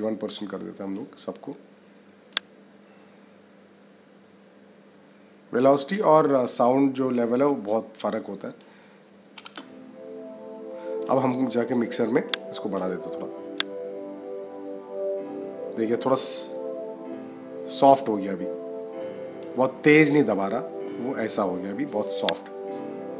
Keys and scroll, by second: 9.3 space.